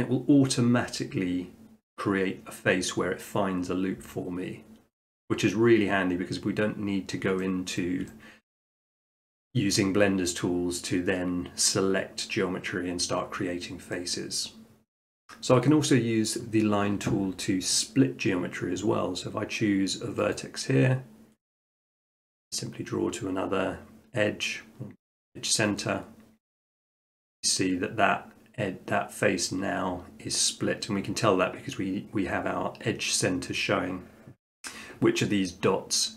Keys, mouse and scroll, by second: 0.5-1.6 middle drag, 5.4 middle click, 6.1-8.5 middle drag, 20.4-21.4 drag, 25.8-26.9 drag, 27.2-28.2 right drag.